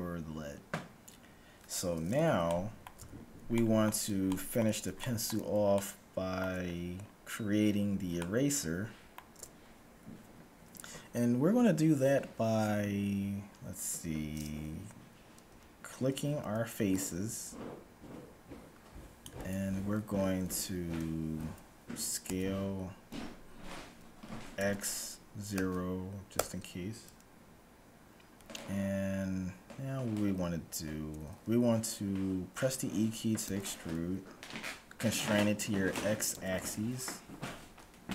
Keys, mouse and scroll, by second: 1.1-2.6 scroll up 1, 2.6-7.7 middle drag, 7.7-8.1 scroll up 1, 8.1-9.9 middle drag, 15.6 z, 16.6 c, 22.2 s, 33.6 e.